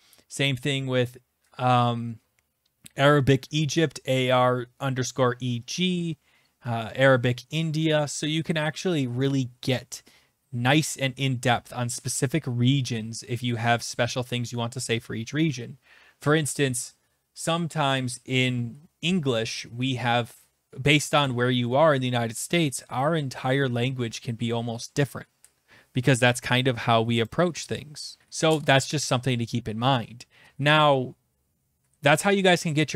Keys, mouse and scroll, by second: 5.8-9.4 scroll, 9.4 scroll, 10.9 scroll, 11.6-12.7 scroll, 12.7 scroll, 13.4-14.6 scroll, 27.3 click.